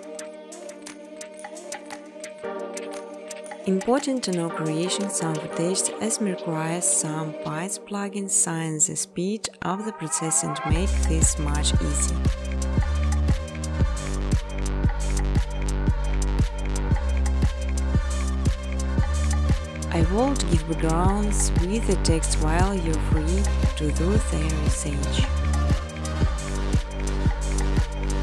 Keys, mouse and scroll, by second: 0.5-1.1 scroll, 1.1-1.8 scroll, 3.1-4.7 scroll, 4.7 click, 6.6 click, 8.4 click, 9.1 click, 9.9 click, 10.6 click, 11.8 click, 12.5-14.3 typing, 14.0 Tab, 15.7-17.3 typing, 16.3 Return, 21.3 click, 22.0 click, 23.2-23.9 typing, 24.9 Tab, 27.3-28.2 typing.